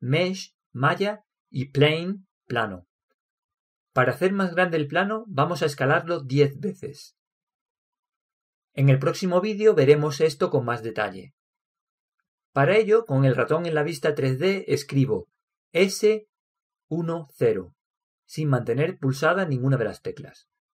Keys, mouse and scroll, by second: 16.3 s.